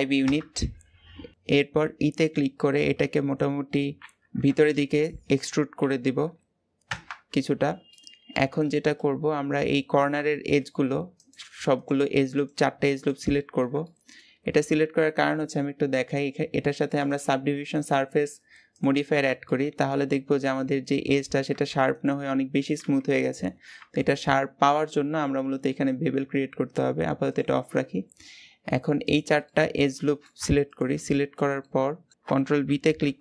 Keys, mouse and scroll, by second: 7.7-8.8 middle drag, 8.8-10.0 scroll up 1, 10.0 shift+middle click, 10.4-11.0 scroll up 1, 11.0 click, 11.5 alt+shift+click, 12.2 alt+shift+click, 12.7 alt+shift+click, 13.2 middle click, 14.1-14.9 scroll up 1, 16.8 click, 18.7 click, 19.3-22.6 middle drag, 23.2-23.8 scroll up 2, 23.8 shift+middle click, 24.4-27.1 scroll down 1, 27.1 click, 28.8 alt+shift+click, 29.2-30.5 middle drag, 30.5 alt+shift+click, 31.0-32.1 middle drag, 32.1 alt+z, 32.9 ctrl+b.